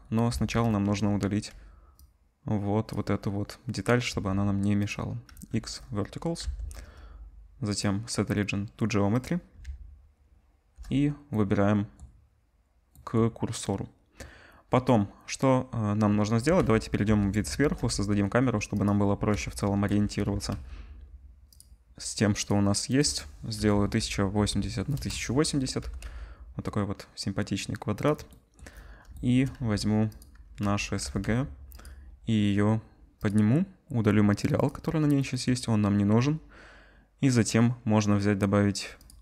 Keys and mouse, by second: 0.3 Tab, 1.3 z, 4.1 x, 5.3 z, 6.4 Tab, 9.6 shift+s, 11.3-12.6 middle drag, 13.6 middle click, 14.4 middle click, 17.0 KP_7, 17.5 shift+a, 19.7 KP_0, 20.3 g, 21.5-23.0 drag, 25.8 g, 26.0-28.0 middle drag, 28.0-34.5 drag, 29.5 z, 30.6 z, 31.0 g, 34.5-39.1 middle drag, 39.1 click.